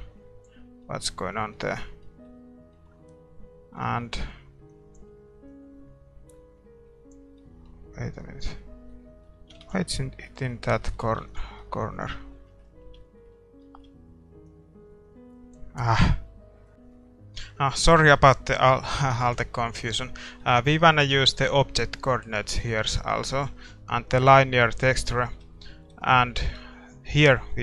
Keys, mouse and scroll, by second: 0.8-5.5 middle drag, 5.5 scroll down 1, 5.8 scroll up 1, 7.4-9.6 middle drag, 9.6 ctrl+s, 11.2 ctrl+s, 11.7-15.4 middle drag, 14.5-27.6 drag.